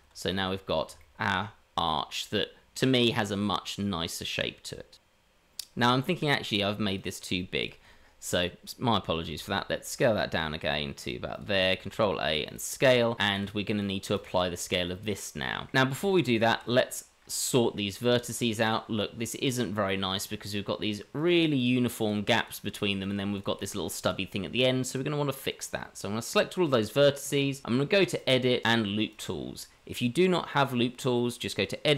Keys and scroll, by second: 9.2 s, 11.7 ctrl+a, 15.9 Tab.